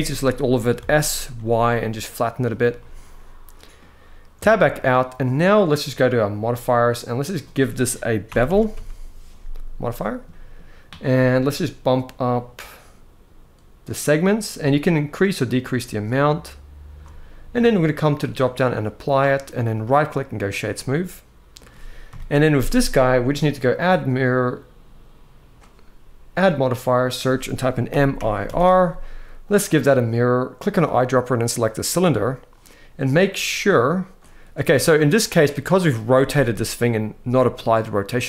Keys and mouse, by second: 0.4 s, 1.0 y, 2.1 click, 2.4-3.4 middle drag, 4.1 Tab, 4.5-5.2 middle drag, 6.5-9.5 drag, 9.9 middle drag, 13.6 click, 14.6-16.7 shift+drag, 17.4-18.1 drag, 19.5-20.2 right drag, 20.5-21.3 middle drag, 21.8 KP_1, 23.4-25.3 drag, 26.1-29.3 drag, 30.4 click, 35.8 r.